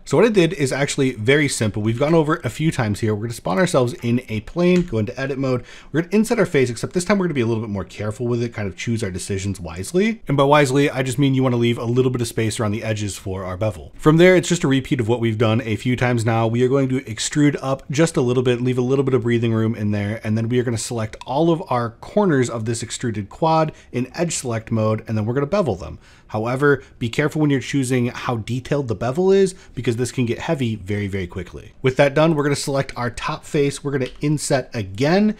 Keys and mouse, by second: 0.1 middle click, 0.7 middle click, 1.1 middle click, 1.5 shift+a, 4.0 middle click, 4.3 Tab, 5.8 i, 10.1 middle click, 10.7 middle click, 11.2 shift+middle click, 13.9 e, 19.9 middle click, 22.0 click, 23.0 middle click, 23.5 shift+middle click, 24.3 shift+click, 24.5 middle click, 25.0 shift+middle click, 25.6 shift+click, 26.3 ctrl+b, 32.5 shift+middle click, 34.8 middle click, 34.8 i.